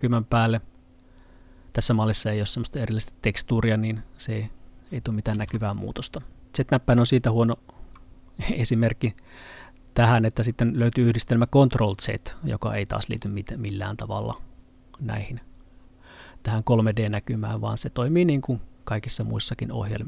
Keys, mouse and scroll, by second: 5.4 z.